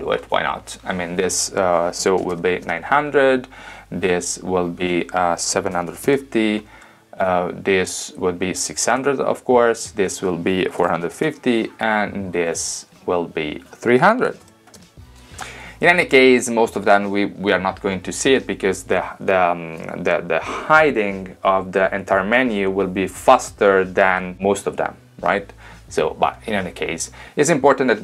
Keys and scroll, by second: 1.9-2.8 typing, 5.7-6.7 typing, 10.7-11.6 typing, 14.2-15.1 typing.